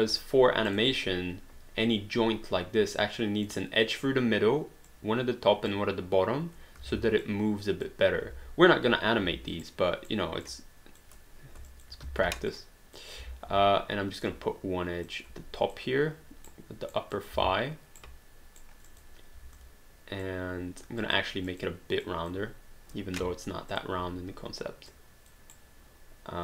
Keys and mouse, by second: 0.7 click, 3.0 click, 4.9 click, 7.2 click, 9.2 w, 9.6 right click, 10.4 click, 11.7 shift+click, 12.0 w, 12.5 click, 14.2 click, 16.5 right click, 17.1 click, 17.4 w, 18.0 right click, 18.9 click, 19.4 w, 19.5 click, 21.0 click, 23.7 click, 24.9 click, 25.5 right click.